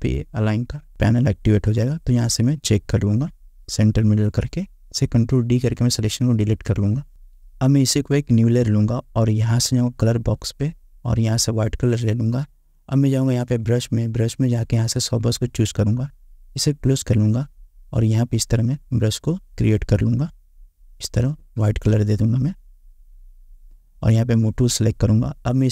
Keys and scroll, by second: 6.6 ctrl+d.